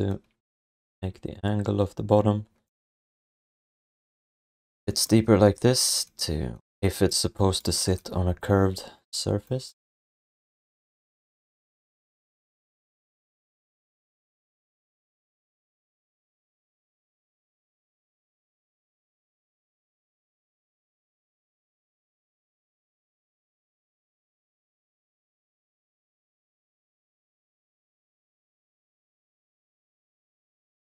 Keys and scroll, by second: 2.7 r, 4.7 w, 6.6 q, 10.4 alt+shift+d, 11.2 w, 14.7-16.4 typing, 16.5 Return, 18.6-20.2 typing, 21.6 Return, 24.6 alt+q, 30.7 ctrl+s.